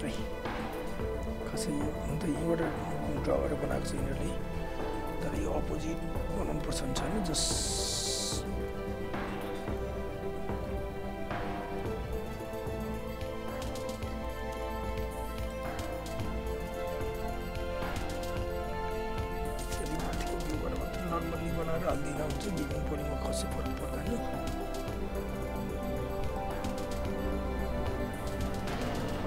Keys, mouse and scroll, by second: 0.1 space, 5.3 space, 5.8 alt+middle click, 6.0 alt+scroll up 1, 6.1 alt+right click, 6.6 f, 7.0 alt+right click, 7.7 alt+middle click, 8.0 alt+right click, 8.5 5, 8.8 alt+right click, 9.8 r, 10.8 click, 11.8 ctrl+z, 12.6 click, 13.8 space, 14.2 f, 14.5 space, 15.0 alt+right click, 15.5 alt+middle click, 15.7 alt+right click, 16.6 click, 17.7 r, 18.1 click, 19.9 space, 20.8 f, 21.2 alt+right click, 21.4 alt+click, 23.0 r, 23.4 click, 24.2 w, 24.8 click, 26.4 alt+middle click, 26.6 alt+right click, 26.8 alt+click, 27.2 alt+right click, 27.6 alt+click.